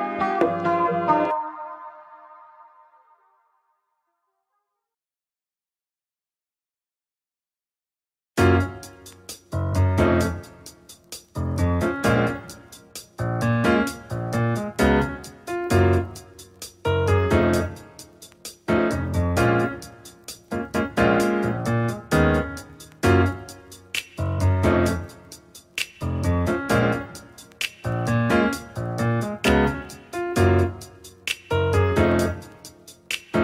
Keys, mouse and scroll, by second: 1.2-7.1 drag, 10.3-12.2 scroll up 5, 12.2 click, 13.0-13.7 scroll down 3, 14.7 click, 15.7-16.9 drag, 16.9-17.9 scroll down 1, 17.9-22.2 scroll down 1, 22.2 click, 23.4-26.5 middle drag, 26.8 click, 28.0 click, 28.2-28.7 scroll down 2, 29.0 KP_Divide, 30.0-30.4 scroll down 2, 31.4 click, 31.8 scroll down 1, 32.0-33.4 middle drag.